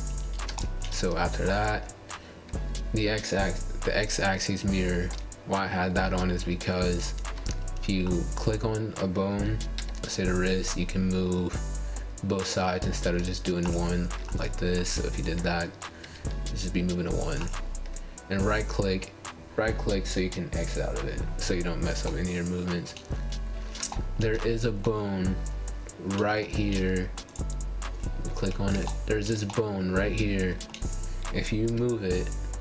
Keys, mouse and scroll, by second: 1.2-5.0 shift+middle drag, 1.2 shift+scroll up 1, 5.0-5.9 scroll down 1, 5.9 scroll down 1, 5.9-6.3 scroll up 5, 6.3 shift+middle click, 7.2 click, 9.2 g, 13.1 click, 13.5 g, 14.4-16.3 middle drag, 16.3-16.8 scroll down 3, 16.8 shift+middle click, 17.6 click, 19.4 g, 21.9 click, 22.1 g, 24.0 click, 24.6 click, 25.9-26.6 scroll up 8, 26.7-28.3 shift+middle drag, 28.3-28.8 scroll up 4, 28.9 shift+middle click, 29.6 click, 31.4-32.4 drag, 32.5 g.